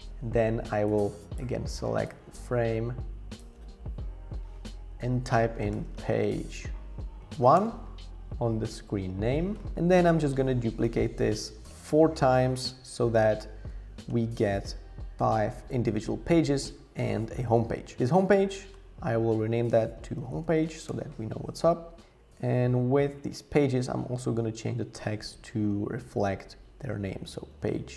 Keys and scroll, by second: 5.0 super+r, 5.5-7.3 typing, 7.6 Return, 19.7-21.1 typing, 27.0-27.9 typing.